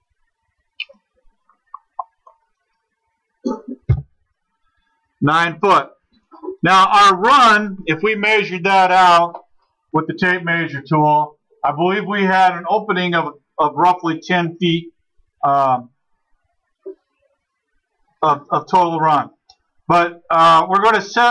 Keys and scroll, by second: 3.9 9.